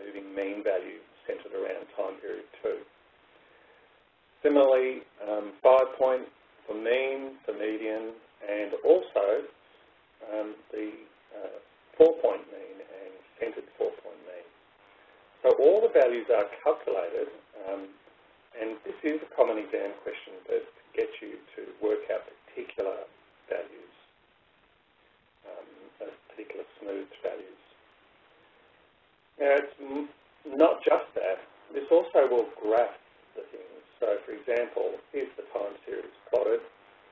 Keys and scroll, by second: 0.2 Escape, 1.2 Right, 19.2 Down, 19.8 Left, 29.5 Right.